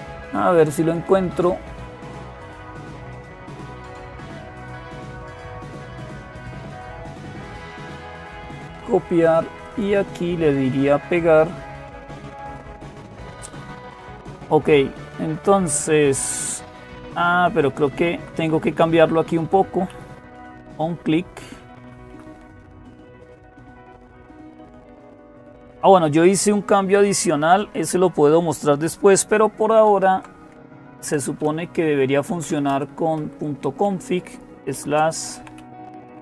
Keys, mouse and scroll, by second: 4.5-6.5 drag, 8.1 click, 9.4-10.6 drag, 11.8 click, 17.4 Up, 17.6 Up, 17.8 Up, 18.0 Up, 18.2 Up, 18.6 Down, 18.8 Down, 19.0 Down, 19.2 Down, 19.7 Up, 20.5-21.9 Right, 29.7 typing, 30.7 typing, 31.9-36.2 typing.